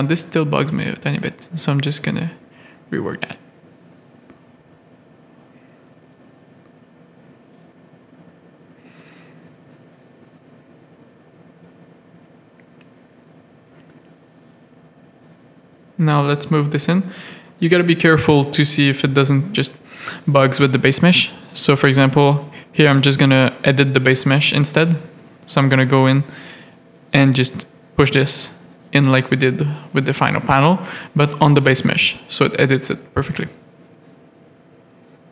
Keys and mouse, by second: 0.7 g, 2.1 Tab, 2.4 middle click, 2.7 alt+a, 3.1 z, 3.4 middle click, 4.5 middle click, 4.9 Tab, 5.2 z, 5.7 ctrl+r, 6.3 click, 6.4 middle click, 8.0 z, 8.2 a, 8.9 click, 9.9 middle click, 10.1 middle click, 10.5 z, 11.2-13.3 drag, 13.6 middle click, 14.2 z, 14.4 a, 15.2 middle click, 16.1 click, 17.7 middle click, 17.9 middle click, 18.2 Tab, 18.5 z, 22.8 click, 24.3 middle click, 24.7 Tab, 24.7 middle click, 25.0 z, 25.2 a, 25.7 click, 26.3 middle click, 27.5 click, 28.5 a, 28.7 click, 29.0 middle click, 30.0 middle click, 31.3-32.6 middle drag, 32.7 Tab, 33.1 z.